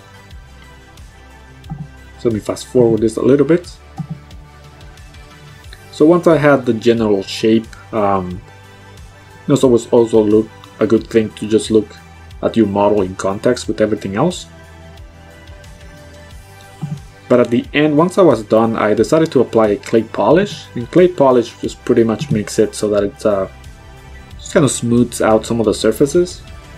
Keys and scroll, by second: 0.2 ctrl+z, 13.2 b, 19.8 ctrl+z, 22.2 ctrl+z.